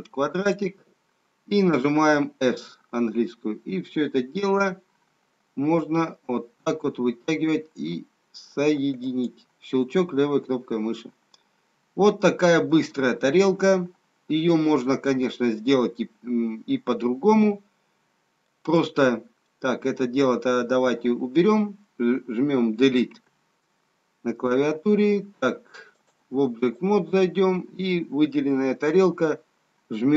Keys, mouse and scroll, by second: 2.9 s, 10.7 middle click, 16.2 middle click, 19.9 middle click, 25.7 Delete, 26.0 click.